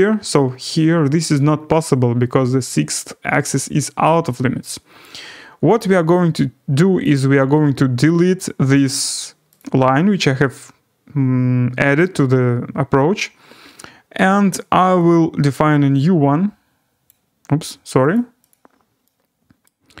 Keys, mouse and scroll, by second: 0.2 scroll up 4, 0.5 scroll, 2.5-3.2 scroll, 4.0 right click, 4.4-5.2 scroll, 7.1 click, 9.5 click, 13.5 middle click, 17.0 click, 18.1 click, 18.5 click, 19.6 right click.